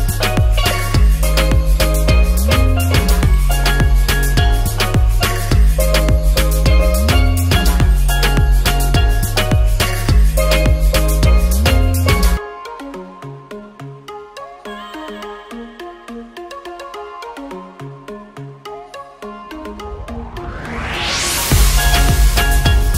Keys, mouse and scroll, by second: 0.2 drag, 4.7 ctrl+s, 4.9 click, 6.4 shift+a, 6.6 shift+middle drag, 7.4 ctrl+s, 7.7 click, 8.9-10.1 drag, 11.0-12.7 drag, 12.4 KP_0, 19.3 ctrl+s, 19.5-19.8 alt+middle drag, 20.2-21.3 middle drag, 21.6 drag, 22.6-22.9 drag.